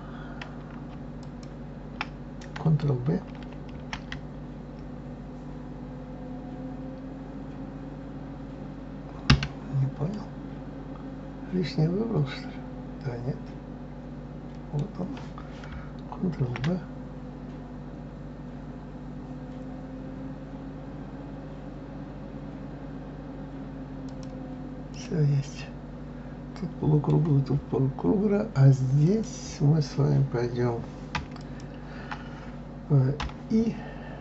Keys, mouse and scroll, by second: 1.2 alt+click, 3.8 ctrl+b, 10.1-13.2 middle drag, 16.4 ctrl+b, 24.9 click, 25.6-27.7 middle drag, 27.7-28.7 scroll up 2, 29.0 click, 31.4 alt+click.